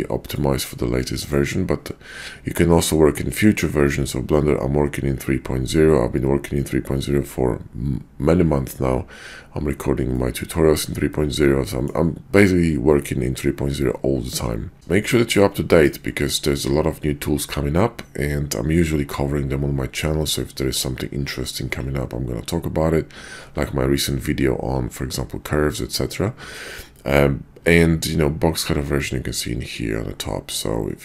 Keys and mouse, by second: 0.2-0.7 shift+middle drag, 1.0 click, 10.2-11.9 middle drag, 15.7-27.7 drag.